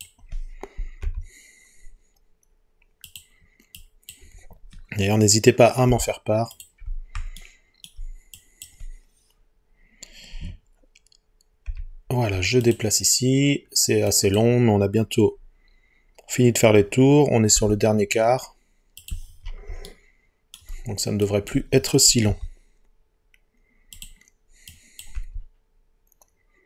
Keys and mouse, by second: 1.1 g, 3.1-4.1 drag, 5.9 Delete, 8.4 click, 11.7 g, 12.7 click, 17.6 g, 19.0 click, 19.9 shift+middle click, 21.3 click, 22.3 g, 24.0 click, 24.7 click, 25.2 g.